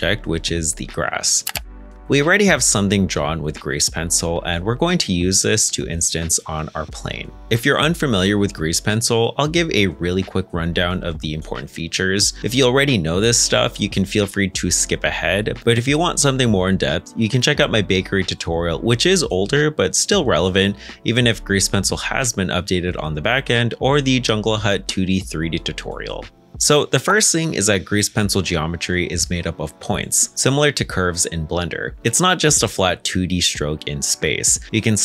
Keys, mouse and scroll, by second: 3.1 shift+middle click, 4.0-4.7 scroll up 1, 4.7 middle click, 5.4 g, 6.3 Escape, 10.3-12.9 scroll down 1, 16.5 middle click, 28.1 /, 28.5 Tab, 29.2-29.9 scroll down 1, 29.9 middle click, 33.9 g, 34.8 Escape.